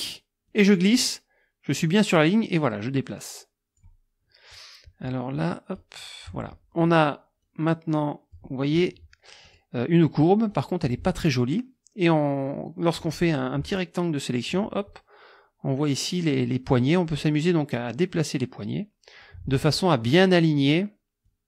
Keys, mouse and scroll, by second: 0.5-4.0 drag, 5.3 click, 7.4-8.6 drag, 9.5 click, 10.5 click, 11.2-13.2 drag, 13.7 click, 17.7-19.4 drag, 21.3-21.4 drag.